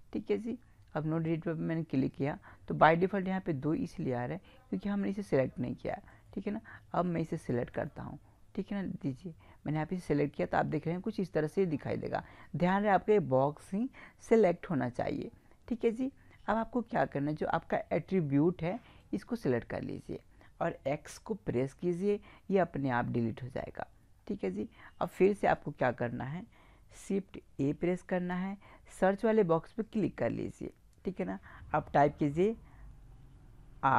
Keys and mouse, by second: 1.3-3.2 drag, 3.2-5.9 middle drag, 6.1 right click, 7.5-9.6 right drag, 11.9-13.5 drag, 13.5 right click, 19.0-20.8 right drag, 21.5 x, 24.8 middle click, 25.5-27.5 drag, 27.6 shift+a.